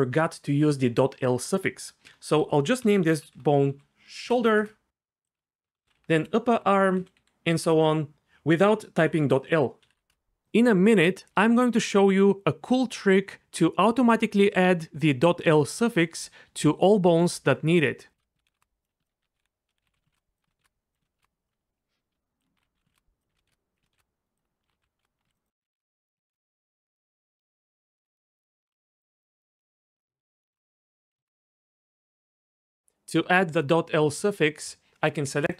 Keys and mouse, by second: 2.0 F2, 5.3 F2, 5.8 p, 9.9 BackSpace, 10.4 click, 10.6 F2, 13.2 F2, 13.9 Left, 14.7 click, 14.8 F2, 15.2 F2, 15.9 F2, 16.3 BackSpace, 16.5 BackSpace, 16.7 F2, 17.5 F2, 18.1 F2, 18.9 F2, 19.1 F2, 19.4 BackSpace, 19.5 BackSpace, 19.9 d, 20.4 F2, 21.0 F2, 21.5 F2, 22.4 F2, 23.3 F2, 23.8 F2, 24.4 F2, 25.2 F2, 25.4 click, 25.6 ctrl+z, 26.0 click, 26.1 F2, 27.6 click, 27.7 F2, 28.4 F2, 29.0 click, 29.2 F2, 30.5 o, 31.0 F2.